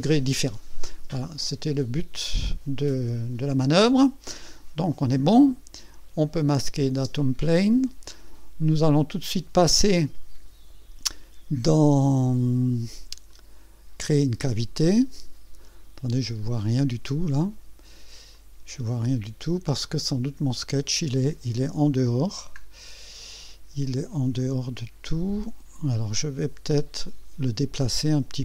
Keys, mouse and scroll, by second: 0.1-2.4 drag, 3.6 click, 6.5 click, 6.9 space, 7.6-9.1 drag, 9.9-10.6 drag, 13.3 click, 16.4 click, 17.4-19.6 drag, 19.8-21.2 drag, 22.3 scroll up 1, 23.2 scroll down 1, 24.4-25.2 right drag, 27.0 click.